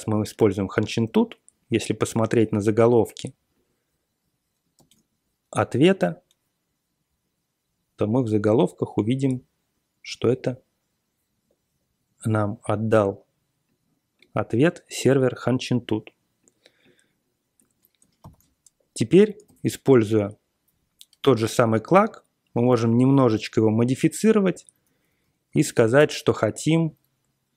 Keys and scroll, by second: 4.7 super+r, 18.3 ctrl+super+t, 19.4 ctrl+super+l, 20.7-21.0 Up, 21.1 Up, 22.7 alt+v, 23.3 Down, 24.2 Up, 24.5 Down, 24.8 Up, 25.2 typing, 25.6 ctrl+alt+f, 25.9 Return, 26.5-27.5 typing.